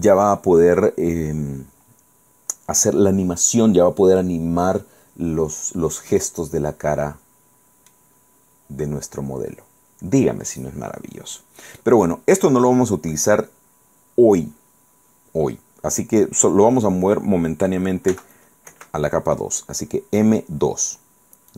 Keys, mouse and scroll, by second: 6.3-8.2 middle drag, 8.2-9.1 scroll down 4, 9.2 scroll down 2, 9.6-9.9 scroll up 2, 10.2-10.6 scroll up 2, 11.0-11.7 scroll down 4, 13.0-13.4 scroll up 2, 18.2 m, 18.9 2, 20.7-21.0 scroll down 2.